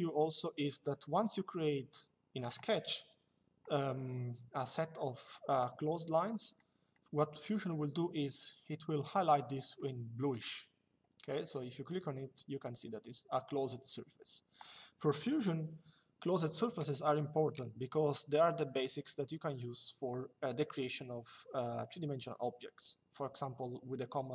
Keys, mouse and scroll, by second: 9.0 click, 11.0 click.